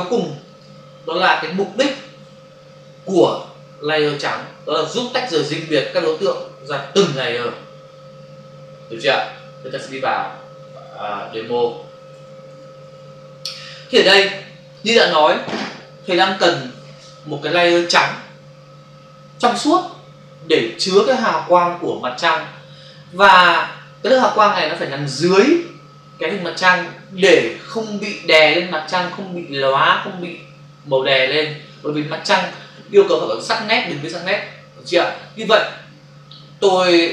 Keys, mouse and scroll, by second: 0.4 click, 10.6 alt+Tab.